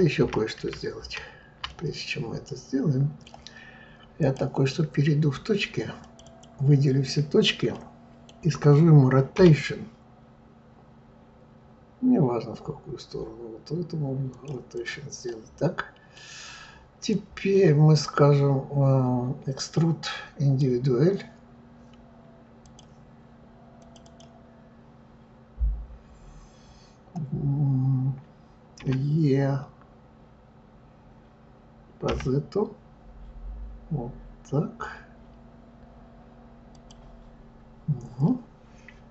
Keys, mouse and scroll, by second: 0.2 ctrl+z, 1.0 ctrl+z, 1.7-4.2 middle drag, 4.2 click, 6.0 click, 6.2 click, 7.7-9.3 middle drag, 9.3 r, 14.7 click, 15.2-17.1 middle drag, 17.1-20.1 drag, 22.6 click, 23.8 click, 24.0 click, 28.8 e.